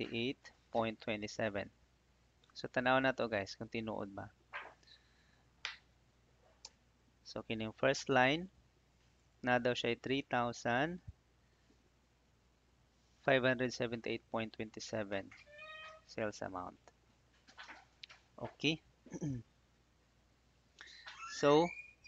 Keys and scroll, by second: 5.3 ctrl+f, 6.6 Return, 7.7 Escape, 10.5 Right, 17.2 Right, 18.5 Left.